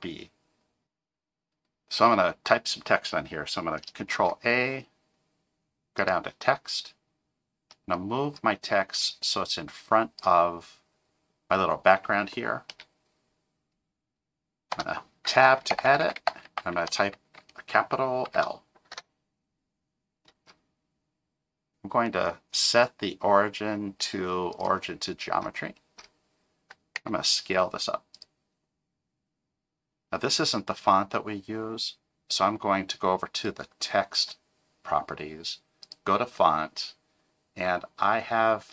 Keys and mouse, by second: 4.1 shift+a, 7.7 middle click, 9.1-10.2 drag, 12.7 KP_0, 14.7 Tab, 15.7 BackSpace, 15.9 BackSpace, 16.0 BackSpace, 16.2 BackSpace, 18.3 shift+l, 18.9 Tab, 21.7-24.7 drag, 27.0 s, 33.4 click, 35.8 click.